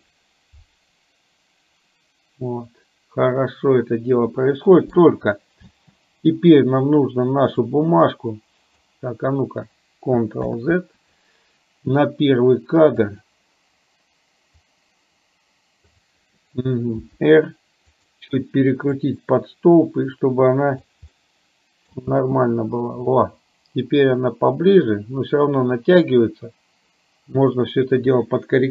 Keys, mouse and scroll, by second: 5.7 space, 7.8-8.9 drag, 10.6 ctrl+z, 13.1 click, 14.8-16.1 drag, 17.1 r, 18.9 click, 19.7-20.9 drag, 21.2 middle click, 21.9 scroll down 1, 22.2 space, 23.2 scroll up 1, 23.3-28.7 middle drag.